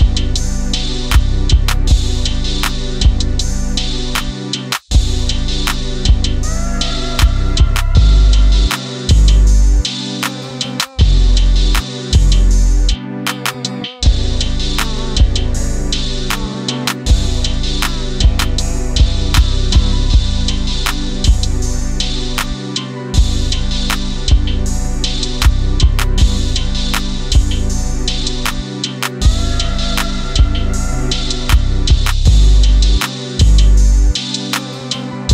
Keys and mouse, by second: 1.0 alt+h, 3.0 h, 3.8 alt+h, 7.7 click, 8.9 click, 9.4 click, 9.7-10.1 middle drag, 10.9 click, 11.9 click, 12.8-13.3 drag, 13.6-14.1 middle drag, 14.7 s, 15.2 click, 15.8 KP_1, 17.5 r, 19.2 click, 19.8 s, 20.7 click, 21.4 KP_1, 21.9 KP_3, 23.4-25.4 drag, 26.1 KP_7, 28.3 g, 29.7 click, 30.5 r, 31.3 click, 32.1 KP_1, 33.1 click, 34.6 KP_3.